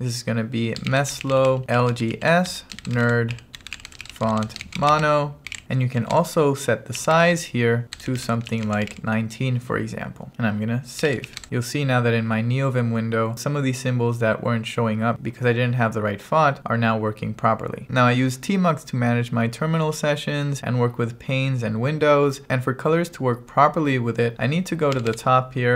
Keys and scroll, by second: 0.7-9.5 typing, 10.8-11.8 typing, 25.0 g.